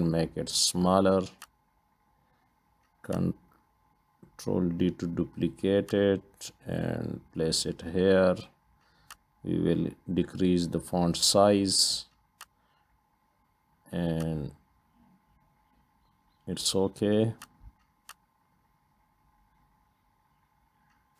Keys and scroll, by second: 4.6 ctrl+d, 19.0 Up, 19.2 Up, 19.3 Up, 19.7 Up.